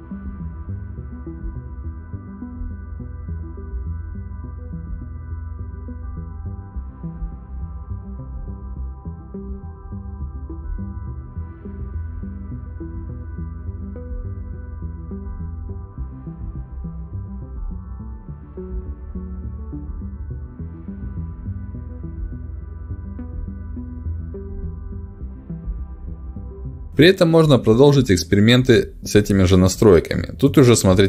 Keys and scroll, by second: 13.4 BackSpace, 14.5 5, 14.6 Return, 17.7 BackSpace, 17.8 3, 17.8 Return, 27.0 ctrl+alt+d.